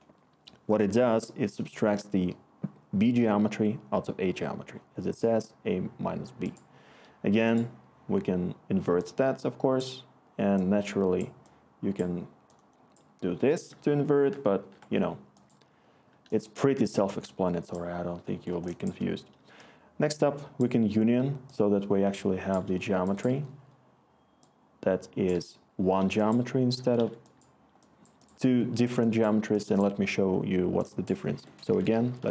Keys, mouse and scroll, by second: 14.3-18.9 ctrl+z, 27.0 Escape, 31.3 Tab, 31.4-32.3 typing.